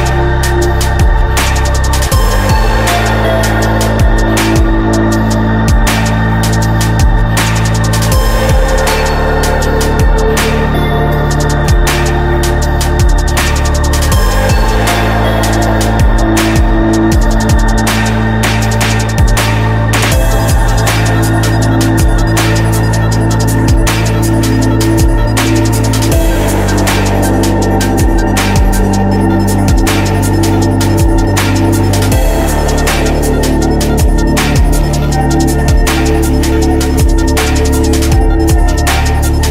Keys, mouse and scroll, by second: 1.8 shift+d, 4.4 Delete, 6.5 shift+d, 9.5 right click, 10.9 shift+d, 16.8 shift+d, 17.6 click, 20.4-21.8 right drag, 24.2 middle click, 25.3 ctrl+z, 26.6 r, 27.6 ctrl+z, 28.5 r, 31.2 middle click, 32.1 click, 33.6 click, 35.1 shift+d, 38.0 KP_0, 39.3 click.